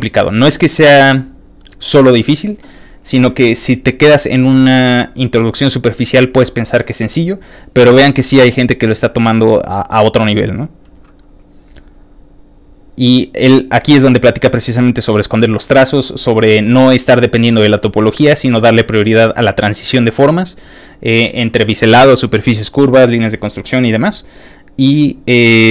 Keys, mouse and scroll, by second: 3.4 ctrl+click, 5.0 ctrl+click, 7.5 ctrl+click, 8.6 ctrl+click, 10.3 ctrl+click, 11.5 ctrl+click, 12.3 ctrl+click, 13.0 ctrl+click, 14.1 ctrl+click, 17.3 ctrl+click, 18.3 ctrl+click, 24.2 ctrl+click, 25.2 ctrl+click.